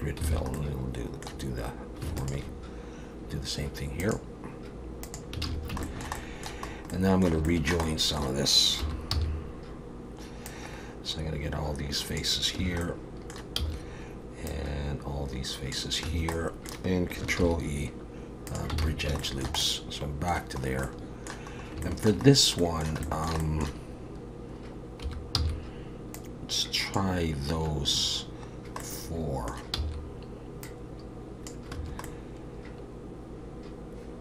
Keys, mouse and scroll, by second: 0.3 alt+a, 0.6 middle click, 2.2 alt+shift+click, 4.0 click, 5.4 alt+a, 5.8 shift+middle click, 6.2 middle click, 6.7 scroll up 2, 6.9 middle click, 7.5 shift+middle click, 7.8 middle click, 8.8 3, 9.1 c, 12.8 middle click, 13.6 c, 16.4 middle click, 17.4 ctrl+e, 18.8 alt+a, 19.2 shift+middle click, 19.6 middle click, 20.6 scroll up 1, 20.8 middle click, 21.5-22.6 scroll up 4, 21.8 middle click, 22.6 middle click, 23.0 shift+middle click, 23.4 middle click, 25.0 3, 25.3 c, 28.8 middle click, 29.8 c, 32.0 middle click.